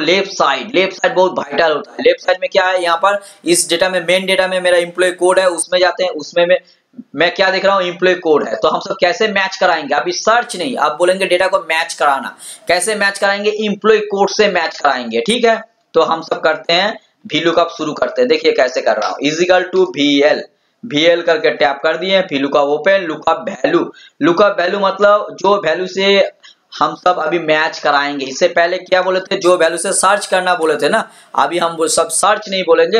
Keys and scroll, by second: 5.7 alt+Tab, 13.3 alt+Tab.